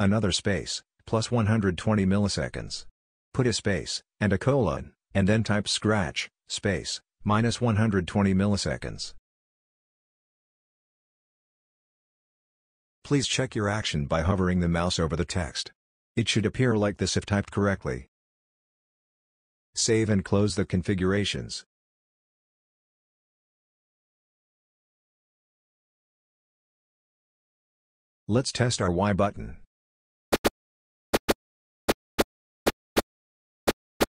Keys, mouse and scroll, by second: 0.0-2.1 typing, 1.6 Right, 3.5 KP_1, 3.6 KP_2, 4.3 m, 5.5 space, 6.3 shift+;, 7.5-11.0 typing, 8.5 Right, 30.3 y, 31.1 y, 31.9 y, 32.6 y, 33.7 y.